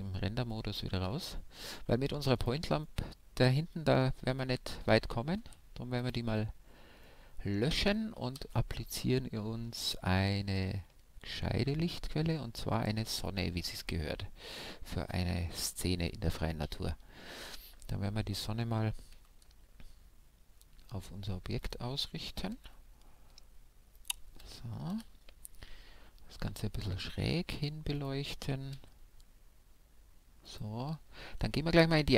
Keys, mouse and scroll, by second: 0.0 middle click, 1.2-2.2 middle drag, 2.4-6.0 middle drag, 2.4-3.4 right drag, 5.3 x, 6.5-8.7 middle drag, 8.3 shift+a, 13.8-15.9 middle drag, 15.9 KP_1, 16.6 KP_3, 17.3 KP_5, 19.2 g, 21.7-23.6 drag, 22.5 r, 24.0-26.0 drag, 24.9 KP_1, 26.5 g, 28.1-29.9 drag, 28.7 r, 30.6-32.1 drag.